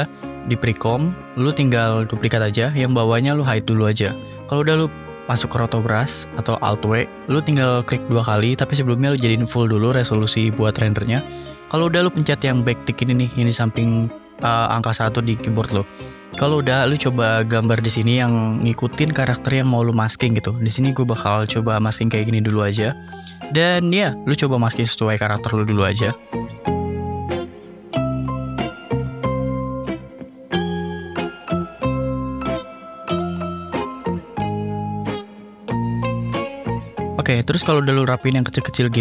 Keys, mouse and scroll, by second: 2.0 ctrl+d, 3.3-4.4 drag, 5.0 click, 7.7 click, 7.8 click, 8.8 click, 9.6 click, 10.6 click, 10.9-12.2 drag, 14.0 scroll up 1, 14.1 scroll, 14.2 scroll up 1, 14.8-15.1 scroll down 1, 15.2 scroll, 15.3-15.8 scroll down 1, 26.1 click, 26.7 click, 28.4 alt+click, 29.2-29.6 scroll, 29.6 click, 30.2 click, 31.0 click, 31.5 click, 32.2 click, 32.6 click, 33.2-33.6 click, 33.7 click, 34.3 click, 34.7 alt+click, 35.6 middle click, 36.0 scroll down 1, 36.1 click, 36.6 scroll up 1, 37.5 alt+click, 38.7 middle click.